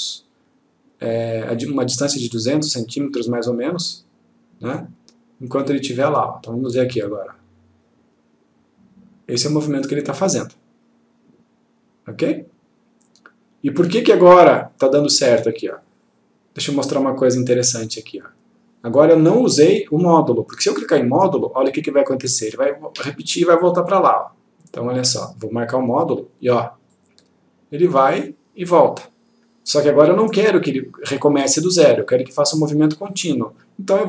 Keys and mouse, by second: 4.9-6.4 click, 18.3-19.2 click, 22.2 click, 26.2 click, 32.3 click.